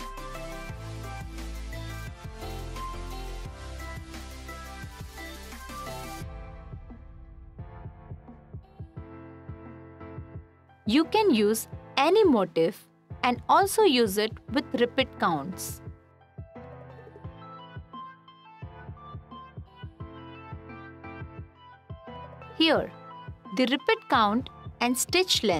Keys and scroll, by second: 18.3 f.